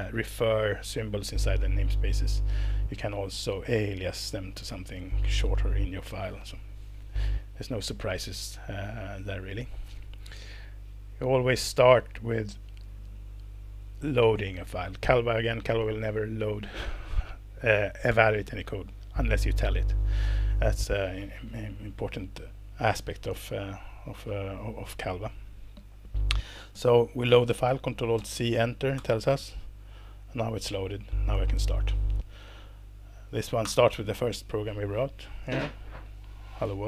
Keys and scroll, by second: 28.1 ctrl+alt+c, 28.9 Return, 33.6 alt+Return, 36.6 Escape.